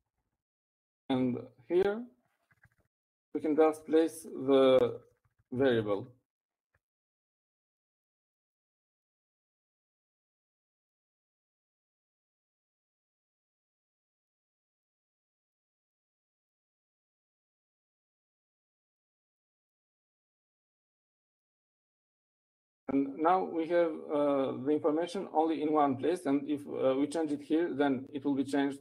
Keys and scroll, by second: 0.6 Down, 1.3 Right, 1.4 Right, 1.6 Right, 1.8 Right, 2.3 Right, 2.4 Right.